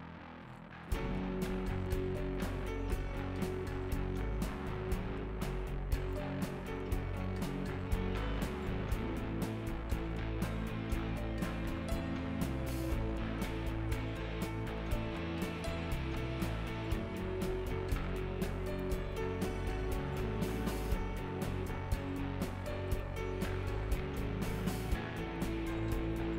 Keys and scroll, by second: 0.1 f.